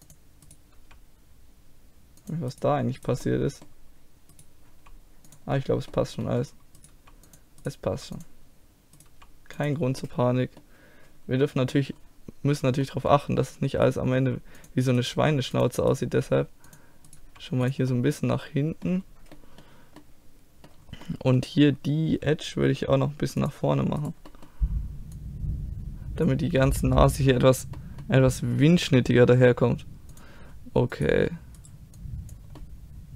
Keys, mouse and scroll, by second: 0.8 g, 1.5 right click, 2.3 middle click, 2.5-4.7 right drag, 3.3 click, 4.7 g, 5.3 click, 5.6 right click, 5.8-6.8 middle drag, 6.8 right click, 7.0 g, 7.9 g, 9.1 g, 9.8 click, 10.1-11.1 middle drag, 14.2-16.1 drag, 14.2 g, 15.2 g, 16.1 g, 17.2 g, 17.9 click, 18.4-23.4 middle drag, 23.4-24.5 drag, 24.0 right click, 24.3-26.0 middle drag, 25.2 click, 25.2 right click, 25.5-27.0 drag, 25.5 right click, 27.0-30.1 middle drag, 30.1-32.0 drag, 30.9-32.0 right drag, 32.6-33.1 middle drag.